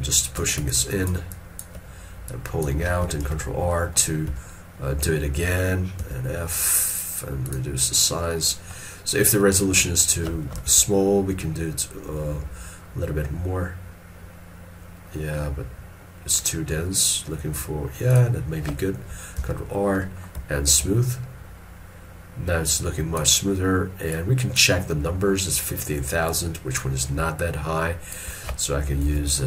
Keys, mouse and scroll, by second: 0.8 ctrl+click, 1.4 ctrl+click, 3.3 ctrl+r, 3.8 middle click, 4.4 s, 8.1 double click, 10.4 middle click, 10.7 shift+r, 19.5 ctrl+r, 20.1 middle click, 20.8 shift+click, 29.1 ctrl+z.